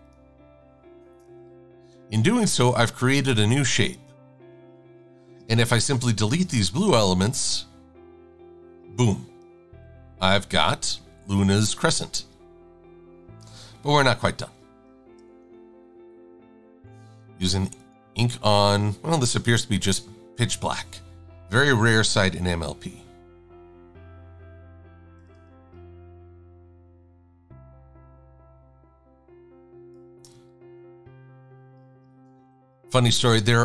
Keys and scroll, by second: 4.9 super+z, 5.5 shift+super+a, 7.8 Delete, 8.8 v, 11.7 super+z, 12.1 super+z, 13.8 super+-, 14.0 super+-, 15.2 shift+a, 17.3 i, 25.7 a, 32.2 shift+super+a, 32.8 a.